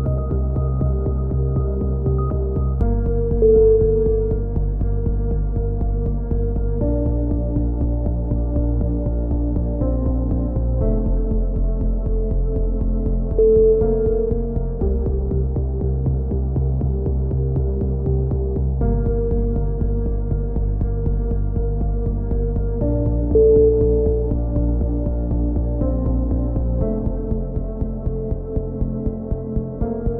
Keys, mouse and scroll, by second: 0.7 ctrl+KP_7, 2.3 click, 2.3 z, 3.4 z, 4.2 middle click, 4.6-5.7 middle drag, 7.5 middle click, 9.8-11.7 middle drag, 11.7 ctrl+KP_7, 12.6 k, 15.0 a, 15.1 middle click, 15.2 z, 15.6 z, 17.3 KP_3, 17.7 click, 18.5 z, 20.1 right click, 21.1 right click, 21.6 right click, 22.5 click, 23.6 a, 23.8 z, 24.2 z, 24.6 z, 24.9 click, 26.6 click, 27.3 x, 27.6 right click, 28.2 a, 28.4 click, 29.3-30.1 middle drag, 29.9 k.